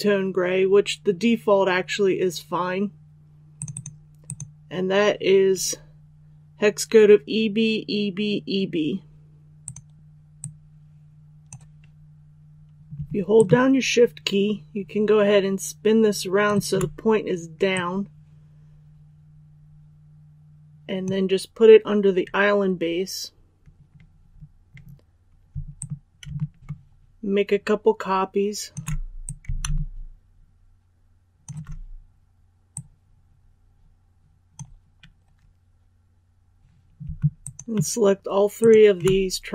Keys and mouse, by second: 3.5-11.4 drag, 13.3-16.4 shift+drag, 17.7-21.4 drag, 25.7-35.4 alt+drag, 37.3-38.5 shift+drag.